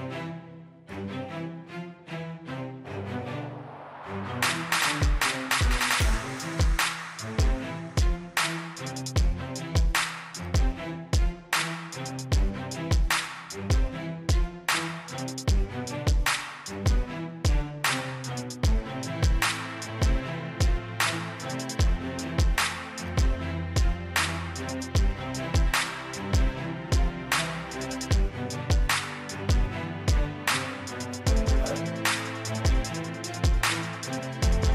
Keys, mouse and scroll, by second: 3.7 6, 6.0 BackSpace, 7.1 typing, 8.4 BackSpace, 9.8 Return, 11.3-13.9 drag, 19.4-21.0 scroll down 1, 21.0-23.3 scroll up 1, 23.9 3, 25.9 Return, 27.4 click, 28.4 right click, 29.1 click.